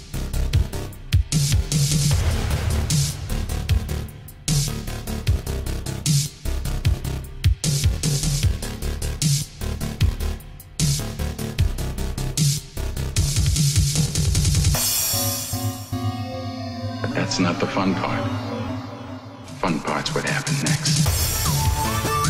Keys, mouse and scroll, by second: 1.5 click, 5.5-7.3 typing, 7.7 click, 12.3 right click, 12.9 click, 15.9 BackSpace, 18.8 Return, 20.0 click.